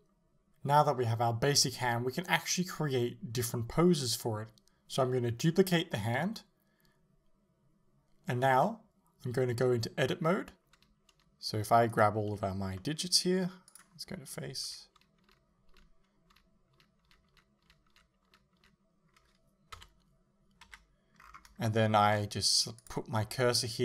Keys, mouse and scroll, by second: 1.5 right click, 2.3 KP_7, 2.9-3.5 scroll down 1, 3.5 shift+d, 6.8 click, 6.9-8.0 middle drag, 7.6-8.0 scroll up 1, 8.0 a, 8.4 middle click, 9.5 shift+middle click, 10.3 Tab, 10.5-12.0 middle drag, 12.0 right click, 12.8 middle click, 13.7 click, 14.4 l, 19.8 KP_1, 20.7 KP_3, 21.2 scroll up 1, 21.7-22.9 shift+middle drag, 22.9 click.